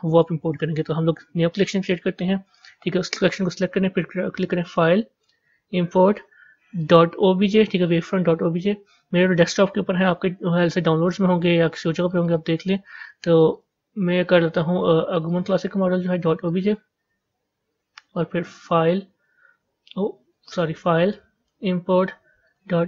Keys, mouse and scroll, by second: 1.5 right click, 2.4 click, 4.5-7.9 drag, 18.7-22.8 drag.